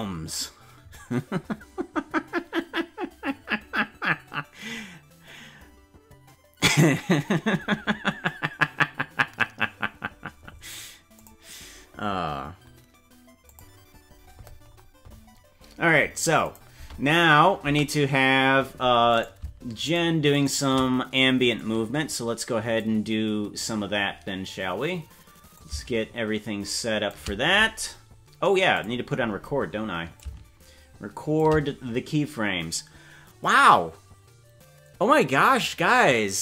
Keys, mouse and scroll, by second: 15.4 scroll up 3, 16.5 click, 16.7 space, 17.7 space, 19.2 right click, 20.1 shift+right click, 20.5 right click, 21.6-22.8 drag, 23.3 scroll down 2, 25.5-27.1 shift+drag, 28.7 click, 30.1-31.4 shift+drag.